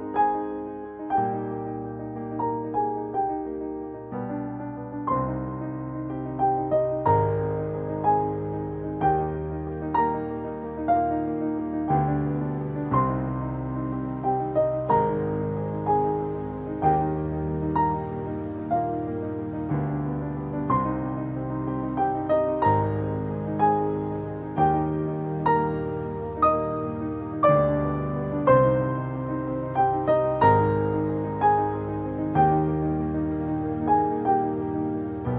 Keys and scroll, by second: 16.4 ctrl+u, 26.8 ctrl+b.